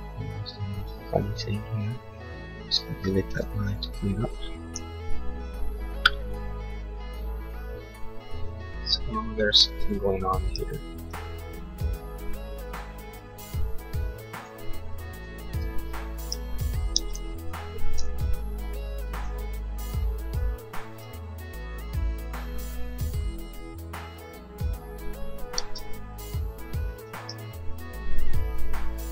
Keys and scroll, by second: 4.8 l, 16.9 e, 18.5 l, 25.6 e.